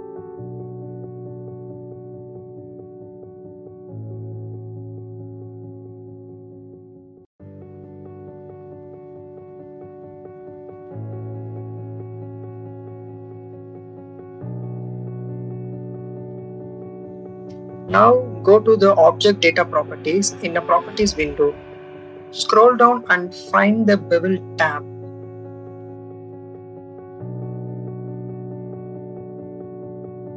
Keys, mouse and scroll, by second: 0.1-1.8 drag, 2.1 click, 2.7 click, 3.9 shift+click, 7.1 click, 7.5-8.9 drag, 9.3 click, 9.7 click, 10.9 click, 11.8 click, 12.2 click, 13.2 click, 13.6 click, 14.7 click, 15.1-16.4 drag, 16.6 click, 17.1-20.0 drag, 20.3 click, 21.2 click, 23.0 click, 26.4 click, 26.8 click, 27.5 click, 27.6 click, 29.7 click.